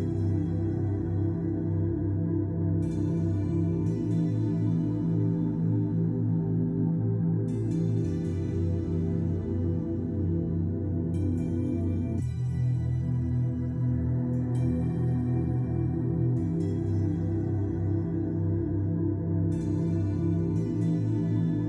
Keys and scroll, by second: 8.5 2, 8.9 Return, 10.5 2, 10.9 Return, 20.6 Escape.